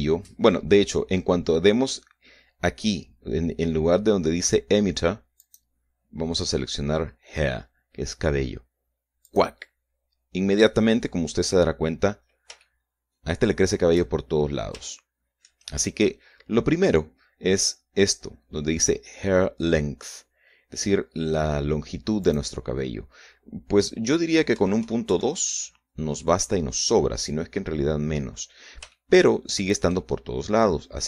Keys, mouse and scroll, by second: 6.1 click, 10.0 click, 10.8-13.2 scroll down 3, 13.3-14.9 shift+middle drag, 14.9-15.4 shift+scroll up 3, 15.6 shift+middle click, 23.0 click, 25.2 KP_Decimal, 25.5 KP_2, 25.8 KP_Enter, 28.8-29.4 scroll down 1, 29.6-30.6 shift+middle drag.